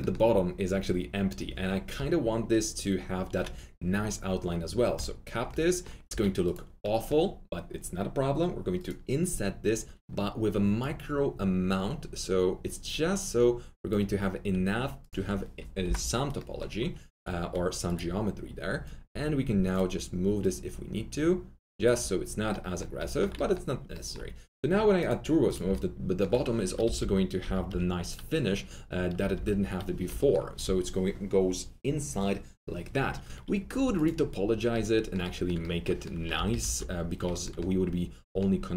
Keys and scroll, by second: 6.0 alt+4, 15.8 Delete, 22.9 1, 26.8 alt+F3, 26.9-27.6 typing, 29.1 F3, 29.2-29.9 typing, 36.3 alt+F3, 36.5 alt+F4.